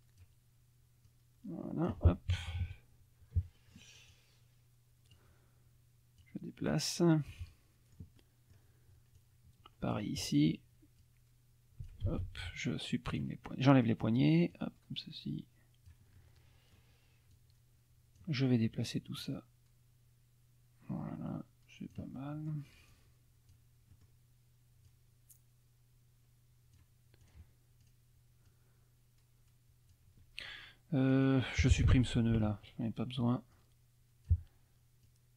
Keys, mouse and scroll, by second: 1.0-2.1 drag, 2.3 KP_Subtract, 3.4 middle click, 4.1-5.3 drag, 6.2-7.5 drag, 7.5 middle click, 8.2 middle click, 8.3 click, 9.1 click, 11.0-12.0 drag, 12.1 ctrl+z, 13.1 click, 14.5-16.1 drag, 16.2 click, 17.3-18.4 drag, 19.2-22.1 drag, 22.2 middle click, 22.9 click, 23.9 middle click, 24.9-27.0 drag, 27.2 click, 27.8 click, 28.5-30.1 drag, 31.1 click, 32.3 Delete, 33.5 click, 35.1 click.